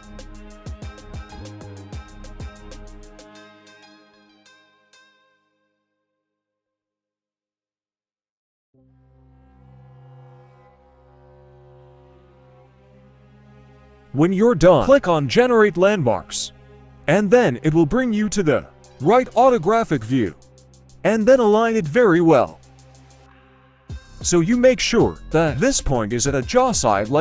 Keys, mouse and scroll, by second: 0.4 click, 0.4 right click, 0.5-3.7 typing, 0.9 click, 0.9 right click, 1.5 click, 1.5 right click, 2.2 click, 2.2 right click, 2.7 click, 2.7 right click, 3.2-3.5 scroll down 1, 3.5 click, 3.5 right click, 4.4 scroll down 1, 4.6 shift+middle click, 5.7 scroll up 2, 5.9 click, 5.9 right click, 6.0-7.2 drag, 6.3 g, 7.2 right click, 7.3-8.3 drag, 7.3 g, 8.3-9.8 scroll down 2, 9.8 click, 9.8 right click, 10.0 g, 10.7 click, 10.7 right click, 10.8 g, 11.1 click, 11.1 right click, 11.2 g, 11.7 click, 11.7 right click, 11.8 g, 12.7 click, 12.7 right click, 12.9 g, 14.9 click, 18.5 right click, 19.5 g, 22.6 right click, 22.9 g, 23.7 right click, 23.9 g, 25.4 right click, 25.7 g.